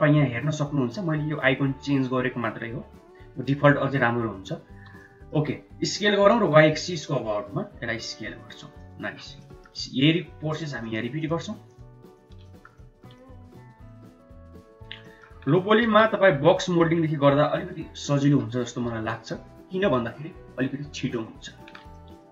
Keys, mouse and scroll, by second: 4.9 shift+middle click, 5.7 s, 9.2 shift+middle click, 9.7 middle click, 11.1 shift+click, 11.6 shift+click, 12.4 middle click, 13.1 middle click, 14.2 shift+click, 14.5 shift+click, 14.9 middle click, 15.5 KP_1, 15.8 KP_3, 17.2 s, 18.3 s, 21.1 shift+middle click, 21.8 middle click.